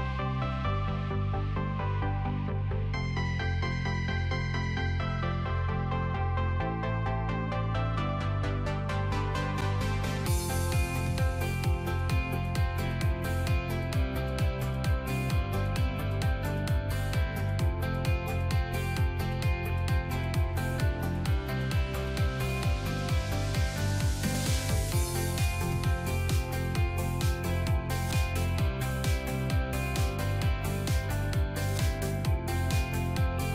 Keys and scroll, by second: 12.3 ctrl+BackSpace.